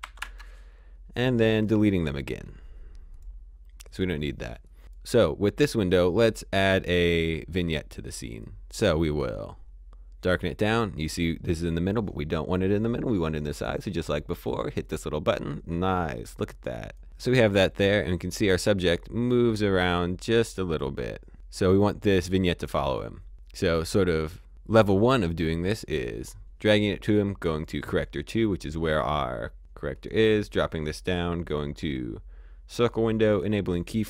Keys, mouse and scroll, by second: 0.0-0.5 typing, 1.5 click, 2.3-3.1 scroll down 1, 3.1 click, 9.4-11.5 scroll down 1, 14.5 click, 15.8 click, 17.9 click, 27.5 click, 29.9 click, 33.2 click.